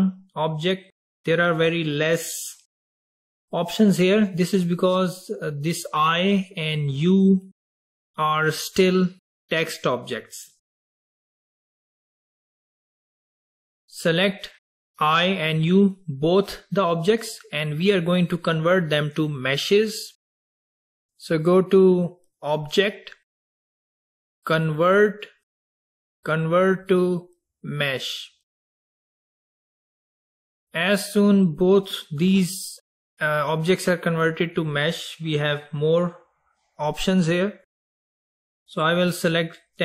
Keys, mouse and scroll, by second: 6.3 click, 7.1 click, 12.2 click, 13.2 click, 13.8 drag, 14.2 click, 21.1-24.2 drag, 30.9 drag, 31.7 click, 33.3 click, 34.2 click.